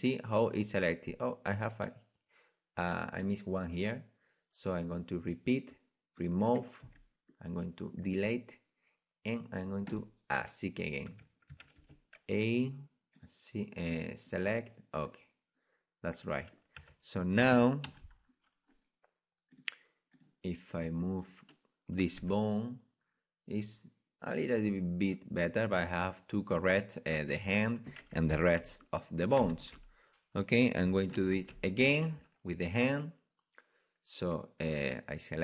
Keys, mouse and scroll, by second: 7.3 c, 9.9-11.5 drag, 11.1 Tab, 11.5 Tab, 11.8 a, 13.2-16.0 drag, 15.1 middle click, 15.3 right click, 15.5 right click, 15.7 right click, 15.7 middle click, 16.0-17.9 middle drag, 16.8 Tab, 17.9 KP_1, 22.2-22.6 right drag, 22.2 r, 30.6 ctrl+z, 32.6 ctrl+z, 34.7 ctrl+z.